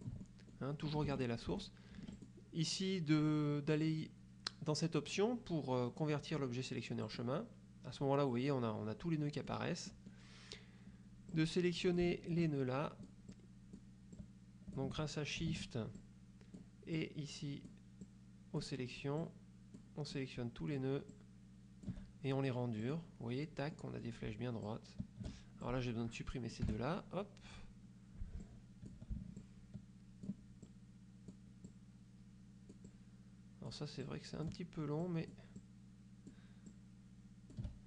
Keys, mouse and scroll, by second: 1.2 F2, 1.3 click, 2.3 click, 7.2 click, 9.6 click, 10.0 click, 11.4 click, 12.5 shift+click, 14.3 shift+click, 16.1 shift+click, 17.0 shift+click, 18.1 shift+click, 19.3 shift+click, 20.2 shift+click, 21.2-22.2 shift+drag, 22.9 click, 23.9 click, 24.8 shift+click, 25.8-26.9 shift+drag, 26.8 Delete, 28.5 click, 29.5-30.6 shift+drag, 30.8 shift+click, 31.8-34.0 shift+drag, 34.1 shift+click, 35.1 shift+click, 36.8-37.8 shift+drag.